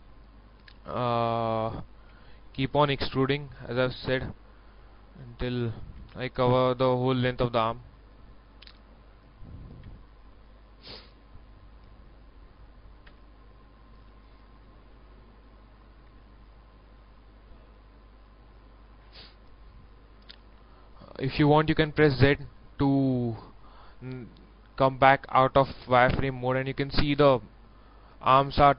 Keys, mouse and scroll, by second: 2.1 e, 2.8 e, 2.9 click, 4.8 s, 6.0 e, 6.6 e, 8.7 s, 9.8 e, 11.7 s, 13.1 e, 14.7 s, 16.0 click, 19.5-20.0 scroll down 1, 20.0-21.7 middle drag, 22.2 z, 22.6 scroll down 1, 22.9-24.7 middle drag, 25.0 scroll up 1, 26.4-28.7 middle drag.